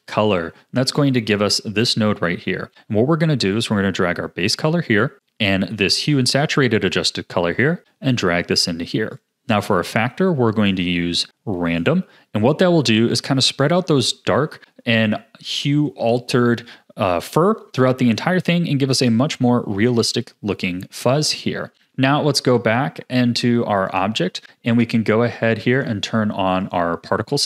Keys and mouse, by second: 2.7 click, 3.7-4.5 drag, 5.1 click, 5.3-6.4 drag, 7.1 click, 7.9 click, 9.2 click, 9.9 click, 10.7-11.8 drag, 23.9 click, 25.7 click.